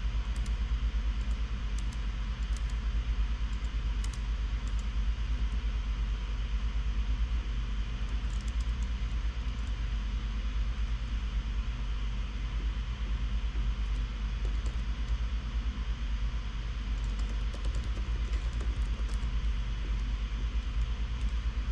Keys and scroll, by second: 0.0-3.3 typing, 3.9 Tab, 4.4 Return, 5.1 Tab, 5.8 ,, 7.3 Return, 7.3 typing, 8.6 super+f, 8.9 shift+Return, 9.5 Escape, 11.2 shift+super+e, 14.6-15.6 typing, 17.3-19.9 typing, 20.8 super+b.